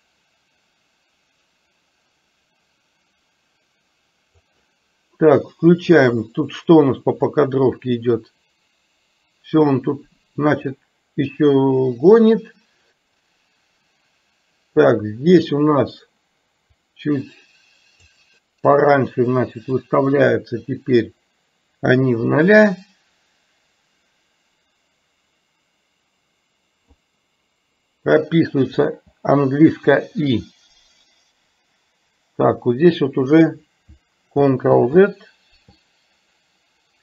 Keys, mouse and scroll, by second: 6.0 click, 7.4-14.9 drag, 16.9 click, 20.0-27.0 drag, 30.0 i, 34.9 ctrl+z.